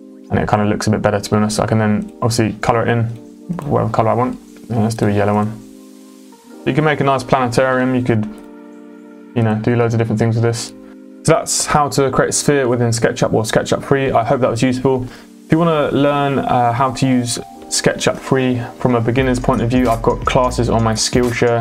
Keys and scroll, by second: 6.3 space, 7.7 m.